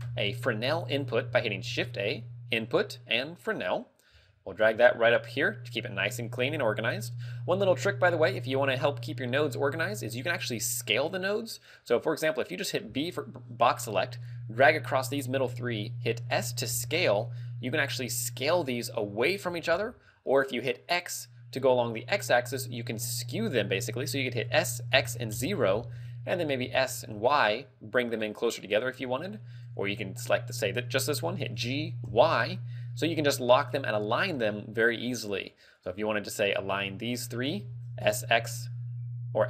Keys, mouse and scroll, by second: 1.6 shift+a, 4.2 g, 6.3 click, 7.4 middle click, 7.9 scroll down 2, 9.9 a, 12.9 b, 16.3 s, 23.9 right click, 24.5 s, 26.7 s, 28.8 click, 28.9 a, 30.2 click, 31.6 g, 34.0 click, 34.2 a, 35.8 click, 36.5 shift+click, 37.2 shift+click, 38.0 s.